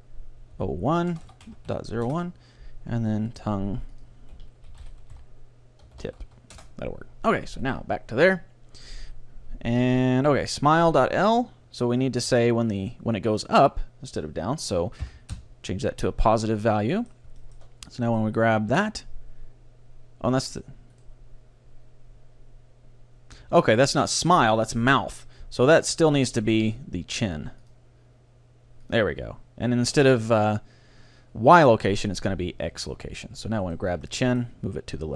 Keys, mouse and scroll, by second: 1.3 BackSpace, 3.4-4.9 right drag, 4.0 click, 5.8 click, 7.7-9.4 right drag, 8.9-10.6 drag, 13.3-15.0 drag, 16.4-19.4 middle drag, 18.2-20.0 right drag, 19.0 g, 20.6-22.8 right drag, 21.3-22.9 middle drag, 27.7-29.4 drag, 31.8-33.7 drag, 33.7-35.1 right drag, 34.1-35.1 middle drag, 34.7 g.